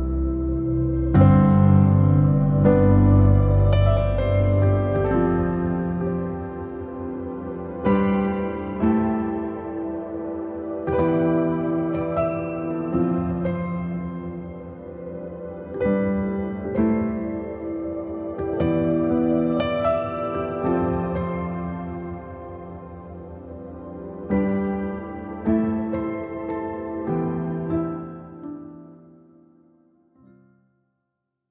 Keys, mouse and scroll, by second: 0.7 click, 1.0-1.4 scroll down 3, 1.8 shift+middle click, 2.1 shift+scroll up 1, 2.3 click, 2.4 scroll down 3, 2.7 middle click, 3.0 click, 3.4-4.6 alt+middle drag, 4.6-4.9 shift+scroll up 3, 5.0 middle click, 5.9 scroll up 1, 6.1 click, 6.3 scroll down 3, 6.5 alt+middle click, 6.9 alt+middle click, 7.3-7.7 scroll up 1, 8.5 ctrl+s, 8.9-10.6 middle drag, 10.6-11.1 scroll up 3, 11.1-12.7 shift+middle drag, 12.7-13.0 scroll up 3, 13.0-16.8 middle drag, 16.8 click, 17.1 scroll down 2, 17.3 shift+middle click, 17.6-17.9 scroll up 2, 17.9-19.0 shift+middle drag, 19.0 scroll up 1, 19.2-23.2 middle drag, 23.2 click, 23.7-31.5 middle drag.